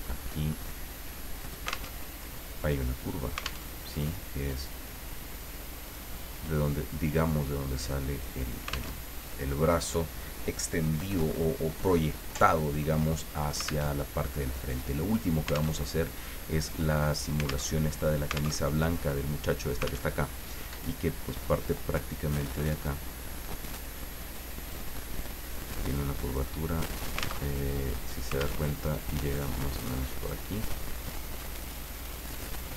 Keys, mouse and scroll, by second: 0.1-1.9 drag, 1.9 alt+Tab, 3.6 alt+Tab, 5.4 click, 6.9-8.6 drag, 8.9 alt+Tab, 13.9 alt+Tab, 15.1 click, 15.8 alt+Tab, 17.7 alt+Tab, 18.6 alt+Tab, 20.0 alt+Tab, 22.7 click, 23.8 click, 26.2 click, 27.4 alt+Tab, 28.6 alt+Tab, 29.6 click, 31.7 click.